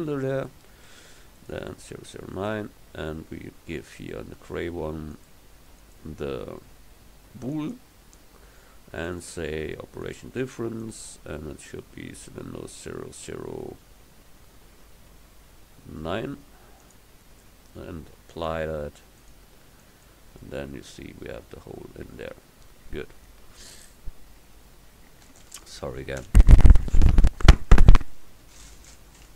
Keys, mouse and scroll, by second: 5.2-7.8 drag, 9.1-19.3 drag, 19.3 right click, 19.6-20.7 middle drag.